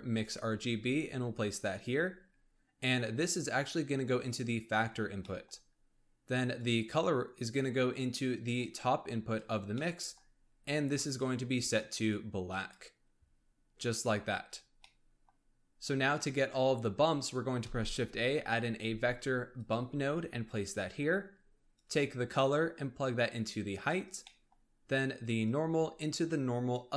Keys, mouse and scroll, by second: 3.1 click, 5.0 scroll down 1, 5.2-6.5 middle drag, 6.5 click, 9.7 middle click, 10.2-10.9 scroll up 3, 10.9 click, 14.0-14.4 scroll up 3, 14.4-14.8 scroll down 2, 14.8 middle click, 15.7 shift+a, 17.6 shift+a, 21.7 click, 24.2-25.3 middle drag, 25.3 click.